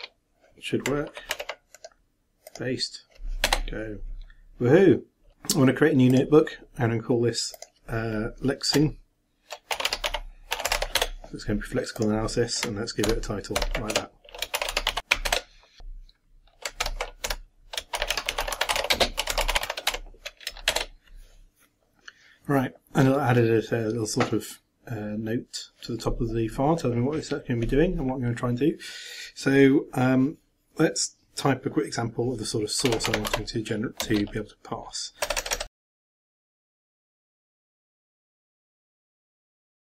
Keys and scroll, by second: 1.3 ctrl+t, 13.1 ctrl+,, 13.5 ctrl+m, 13.9 ctrl+1, 14.3-15.5 typing, 15.6 shift+Return, 16.8 ctrl+m, 17.7-20.4 typing, 20.7 shift+Return, 35.8-38.9 typing.